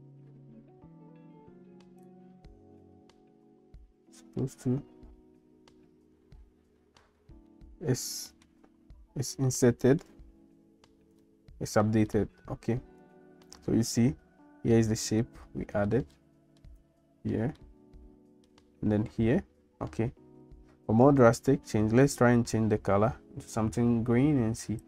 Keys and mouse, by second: 4.0 ctrl+s, 7.6 middle click, 9.5 middle click, 11.2 shift+middle click, 12.2 middle click, 15.2 middle click, 16.2 shift+middle click, 17.6 middle click.